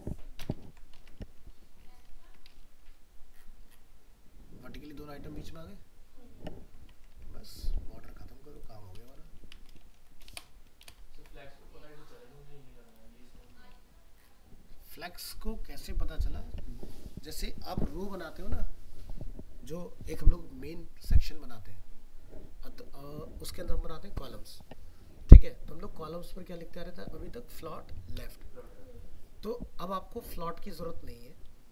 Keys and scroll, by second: 0.6 ctrl+s, 1.0 alt+Tab, 7.0 alt+Tab, 11.1 ctrl+s.